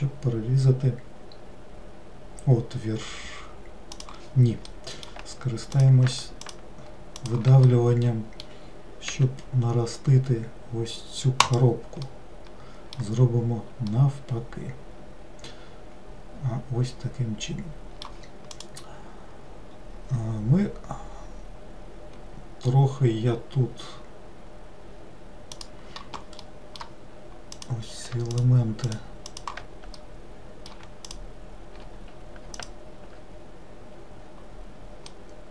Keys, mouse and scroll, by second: 4.7-5.8 middle drag, 5.8 click, 6.5 shift+click, 7.3 shift+click, 7.7-9.1 middle drag, 9.1 e, 12.1-17.0 middle drag, 26.5-27.6 middle drag, 27.6 click, 28.4 shift+click, 28.9 shift+click, 29.4 shift+click, 30.0-31.2 middle drag, 31.2 shift+click, 32.6 alt+click, 35.1 middle click.